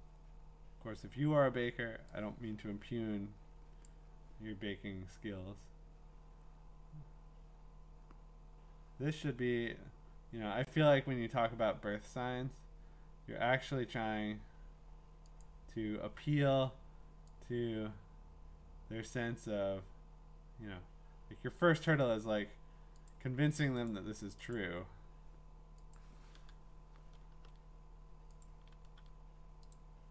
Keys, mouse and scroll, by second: 3.8 click, 5.9-6.9 drag, 15.4-18.5 drag, 21.9 click, 23.1 click, 23.9 click, 24.5 click, 25.9 click, 27.3 ctrl+v, 28.4 click, 28.8 ctrl+v, 29.7 click.